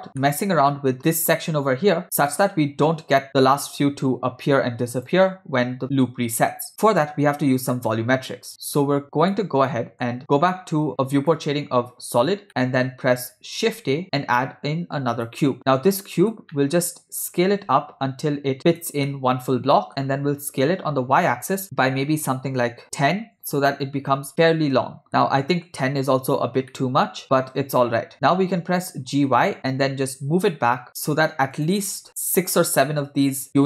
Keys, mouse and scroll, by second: 0.2-1.0 ctrl+middle drag, 3.3 click, 5.1 click, 7.8-8.8 ctrl+middle drag, 9.4 middle click, 11.3 click, 12.5-12.9 middle drag, 13.7 shift+a, 15.6-16.4 middle drag, 16.6-17.2 middle drag, 17.8 s, 19.1-19.9 middle drag, 20.7 s, 24.3-25.1 ctrl+middle drag, 25.1 scroll down 2, 25.1-25.8 shift+middle drag, 26.8-27.2 ctrl+middle drag, 28.1 g.